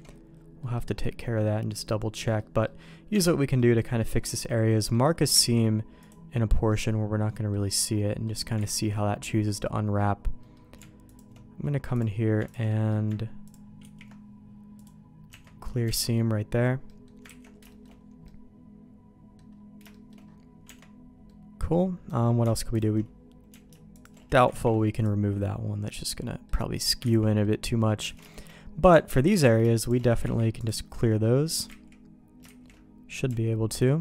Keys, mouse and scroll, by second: 0.0 alt+a, 0.6 middle click, 1.4 middle click, 2.1 middle click, 2.6 middle click, 3.1 Tab, 3.4 middle click, 4.0 click, 4.3 middle click, 5.4 ctrl+e, 5.8-7.5 middle drag, 7.7 middle click, 8.6 ctrl+z, 10.4 middle click, 11.1 alt+click, 11.9 click, 12.7 middle click, 13.4 ctrl+click, 13.8 ctrl+e, 15.3 Tab, 15.9 alt+a, 16.0 middle click, 16.9 middle click, 17.3 ctrl+s, 17.7 shift+middle click, 18.2-19.4 middle drag, 19.9 middle click, 20.7 Tab, 21.3 middle click, 22.7 alt+click, 23.9 alt+shift+click, 24.5 ctrl+e, 25.9 middle click, 27.2 ctrl+z, 27.4 middle click, 28.1 alt+a, 28.3 shift+middle click, 29.9 alt+shift+click, 30.2 ctrl+e, 31.2 middle click, 32.4 ctrl+z.